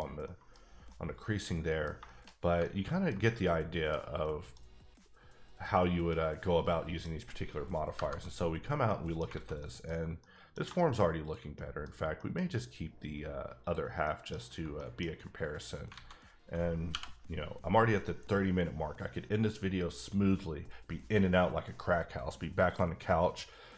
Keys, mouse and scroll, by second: 0.2 middle click, 0.9 middle click, 1.9 scroll down 2, 2.0 shift+middle click, 2.9 ctrl+middle click, 3.5 middle click, 4.2 middle click, 5.7 middle click, 6.6 middle click, 7.9 KP_Divide, 8.9 middle click, 9.2 alt+middle click, 9.3 alt+a, 9.6 middle click, 10.5-10.9 shift+middle drag, 11.2 click, 11.6 middle click, 12.2 middle click, 13.6 click, 14.0 middle click, 14.7 middle click, 15.0 scroll down 1, 15.4-15.8 scroll up 1, 15.9 alt+a, 16.9 l.